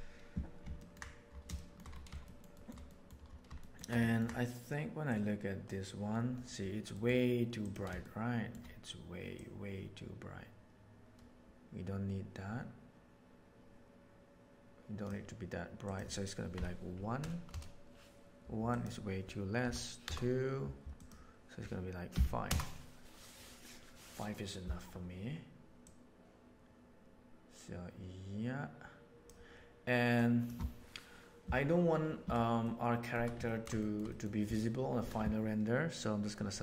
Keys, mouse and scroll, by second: 0.7 ctrl+middle click, 1.5 shift+middle drag, 2.2 middle drag, 2.6 shift+middle click, 2.8 middle drag, 3.1 scroll down 1, 3.6 shift+middle drag, 4.0 ctrl+middle click, 5.1 click, 6.9 middle drag, 8.0-8.5 shift+middle drag, 9.3-12.7 right drag, 12.7-15.0 middle drag, 15.8 middle click, 15.9-24.6 drag, 25.8 click, 26.5-27.8 middle drag, 27.8-29.2 drag, 30.1-30.5 drag, 32.6-33.1 shift+middle drag, 33.4 ctrl+middle click, 33.8 shift+middle click, 34.0 middle click, 34.5 middle click.